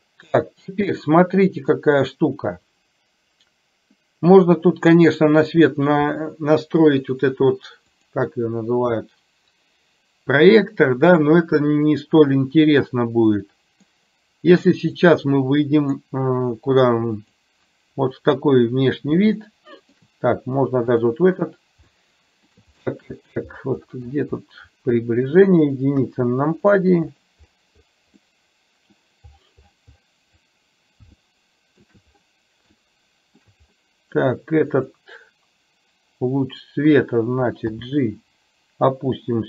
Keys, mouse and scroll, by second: 1.2 middle click, 8.2 click, 13.6 middle click, 15.2-16.1 middle drag, 19.6-20.1 shift+middle drag, 22.1-22.6 shift+middle drag, 25.0-25.5 middle drag, 26.1 KP_1, 28.3-29.1 middle drag, 31.3 shift+middle click, 32.8-33.5 shift+middle drag, 34.7 click, 37.8 g.